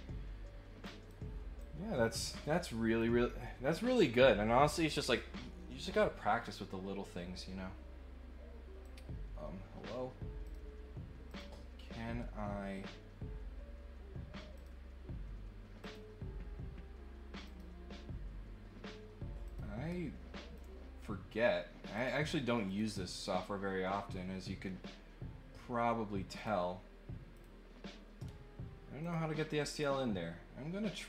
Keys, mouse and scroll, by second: 0.8 click, 1.5-2.9 drag, 5.0 click, 8.8 click, 10.4 click, 11.2 click, 14.5 click, 15.8 click, 17.4 click, 19.4 click, 20.5 click, 21.9 click, 22.6 click, 26.3 click, 27.3 click, 29.0 click, 29.7 click.